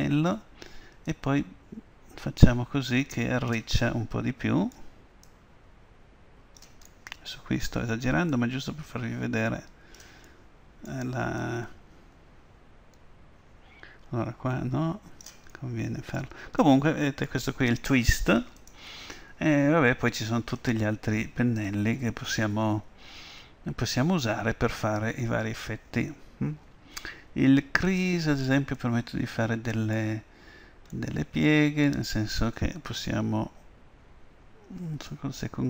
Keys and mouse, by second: 0.0-3.0 drag, 4.0-5.3 middle drag, 5.3-7.0 drag, 7.0-8.4 middle drag, 8.4-10.2 drag, 10.3-11.5 middle drag, 11.5-13.4 drag, 15.6-18.7 middle drag, 18.7-20.6 drag, 28.8-35.2 middle drag, 35.2-35.6 drag.